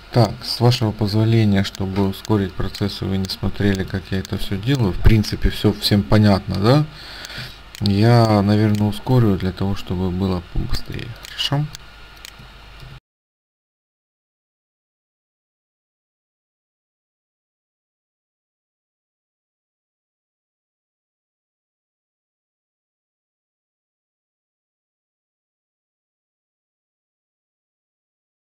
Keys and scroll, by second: 7.5 space, 12.9-15.4 typing, 16.8 ctrl+space, 17.8 ctrl+space, 18.4-21.2 typing, 24.2 t, 25.4-26.8 typing, 28.0-28.4 typing.